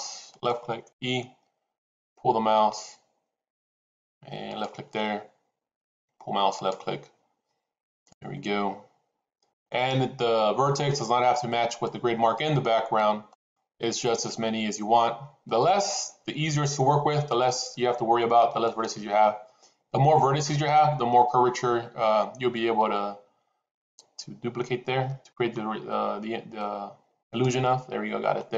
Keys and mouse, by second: 0.8 e, 4.6 e, 6.7 e, 8.1 e, 9.6 e, 11.8 e, 13.3 e, 16.0 e, 23.1 e.